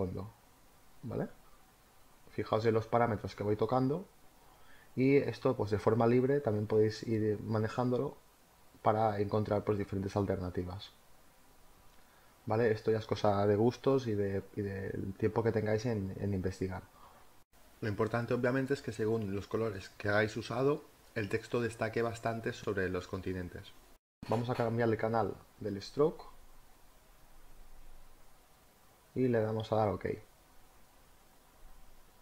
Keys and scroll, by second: 28.8 Down.